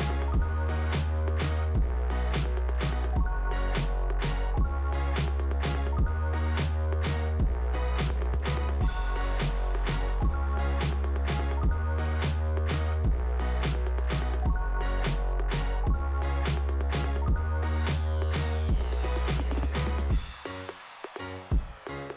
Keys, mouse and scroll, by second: 4.7 click, 4.8 click, 5.4 click, 7.0 click, 8.8 click, 9.8 click, 9.9 click, 10.5 scroll down 1, 13.6-14.1 scroll up 2, 15.8 click, 18.9 click, 21.9 click.